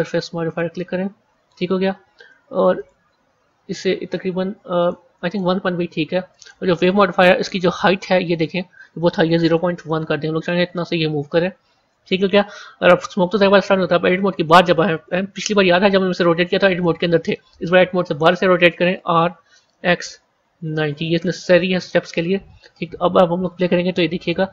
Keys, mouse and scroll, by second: 2.7-6.3 drag, 7.6-8.2 scroll down 1, 8.2-11.4 drag, 15.9 Tab, 18.0 Tab, 18.9 r, 24.1-24.5 drag.